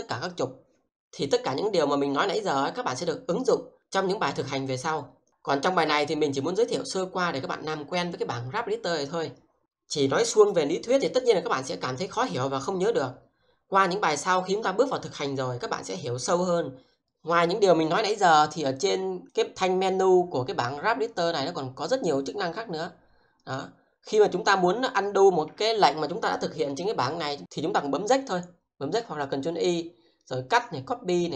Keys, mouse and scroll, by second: 19.2 click.